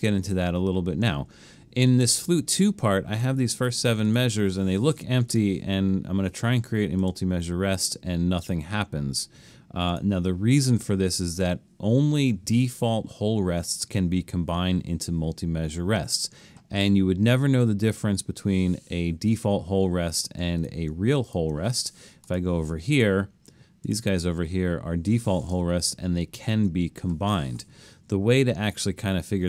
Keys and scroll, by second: 26.6 super+z.